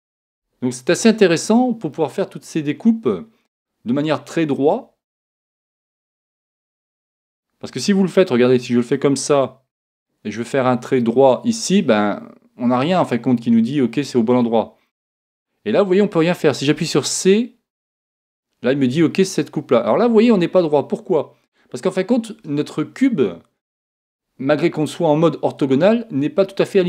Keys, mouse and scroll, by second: 1.9-3.9 middle drag, 4.1-5.6 scroll up 1, 5.6 scroll up 1, 5.8 middle click, 8.5 k.